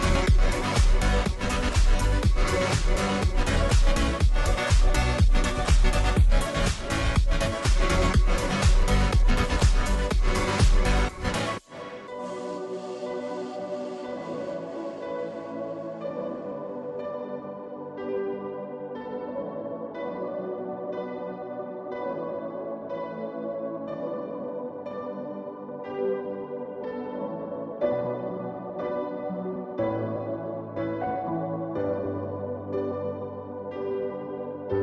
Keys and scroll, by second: 28.6-29.3 typing, 30.7 BackSpace, 30.9 BackSpace, 34.1-34.8 typing.